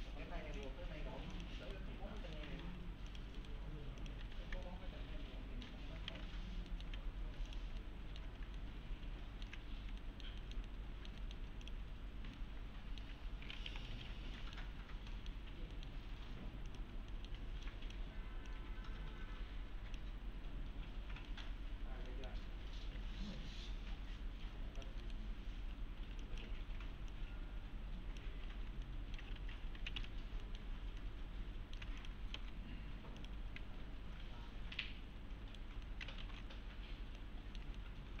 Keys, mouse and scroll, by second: 1.7 right click, 1.9 scroll down 1, 2.2 middle click, 2.5 3, 3.1 click, 3.4 right click, 4.0 click, 4.2 3, 4.4 scroll down 1, 4.7-5.9 alt+middle click, 6.1 alt+q, 6.4 scroll down 1, 6.7 alt+middle click, 7.5 click, 7.8-8.4 alt+middle click, 8.3 alt+scroll down 2, 8.6-9.5 alt+middle click, 9.7 scroll down 1, 10.0 alt+middle click, 10.7-11.5 alt+middle click, 11.6 click, 12.4-13.3 alt+middle click, 13.4-14.4 typing, 14.4 middle click, 14.8 scroll up 1, 15.1 middle click, 16.7 click, 17.1 middle click, 17.4 1, 17.7 click, 18.8-20.0 click, 21.3 middle click, 21.6-22.1 scroll up 1, 22.1 middle click, 22.5-22.9 scroll down 1, 23.0 alt+1, 24.8 click, 25.3 scroll up 1, 25.6-26.0 typing, 26.2 click, 28.3 1, 28.6 scroll down 1, 28.9-29.5 alt+middle click, 29.2 alt+scroll up 2, 29.4 F3, 30.0 F4, 30.1-30.4 scroll down 1, 30.4 middle click, 31.0 alt+middle click, 31.3-31.9 alt+middle click, 32.0 click, 32.4 alt+x, 33.2 click, 34.8-35.7 right click, 35.2 right click, 35.9 middle click, 36.2 ctrl+alt+x, 36.7-37.2 scroll down 1, 37.2-38.2 middle click, 37.8 alt+middle click.